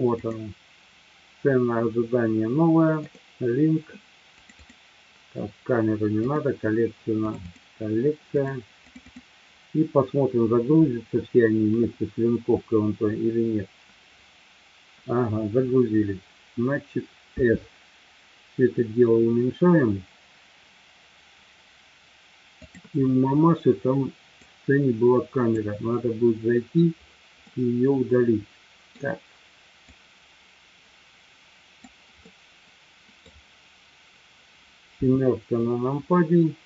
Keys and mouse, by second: 17.4 s, 24.4-25.5 drag, 25.9-26.8 middle drag, 27.5-29.0 middle drag, 29.9-31.9 drag, 32.3-33.3 middle drag, 35.0 KP_7.